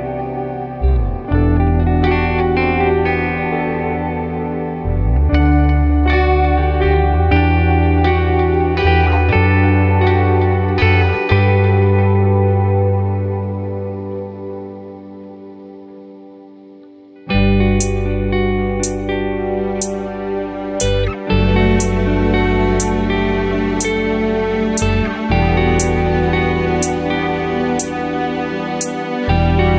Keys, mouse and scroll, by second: 0.5 KP_3, 2.0 r, 3.9 click, 6.4-8.2 drag, 8.9 click, 11.0-12.8 drag, 14.5-18.5 drag, 15.9 KP_0, 17.2 KP_0, 18.9-20.0 scroll down 2, 19.2 middle click, 20.7-22.3 middle drag, 23.5 click, 24.4-26.0 drag, 26.6-27.9 drag, 29.6-29.7 middle drag.